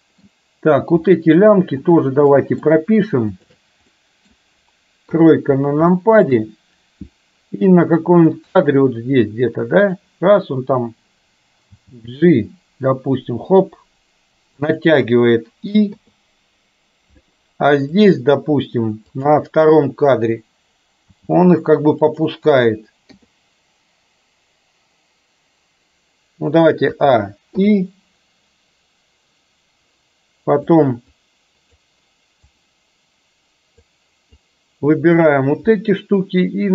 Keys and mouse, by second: 0.0 middle click, 1.9 click, 2.4 middle click, 3.5 shift+drag, 4.0 middle drag, 5.1 KP_3, 6.0 shift+middle drag, 8.8-10.0 drag, 11.8 g, 16.0 i, 18.0 click, 19.1 click, 21.3 g, 23.1 i, 27.0 a, 27.6 i, 30.9 click, 32.6-33.9 drag, 34.6-35.3 drag.